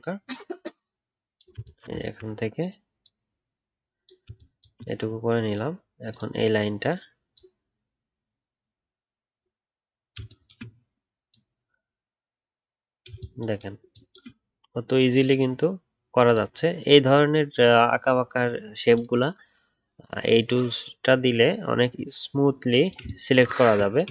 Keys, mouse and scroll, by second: 2.0-3.0 alt+scroll up 2.